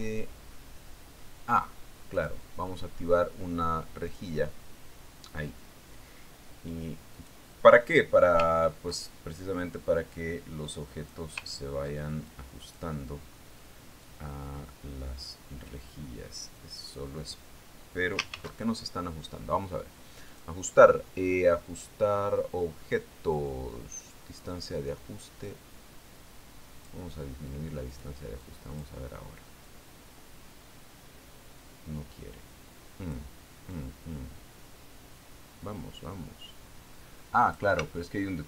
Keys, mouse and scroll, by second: 3.6 click, 5.6 click, 8.6 click, 10.0-10.9 ctrl+scroll up 2, 10.9 ctrl+click, 12.9-13.8 ctrl+scroll up 2, 13.8 ctrl+click, 14.4-15.4 scroll up 1, 15.5-18.6 drag, 19.8 ctrl+shift+d, 21.8 click, 26.9-28.5 drag, 29.4 click, 29.9-30.5 drag, 31.2-34.8 drag, 35.2-38.4 drag.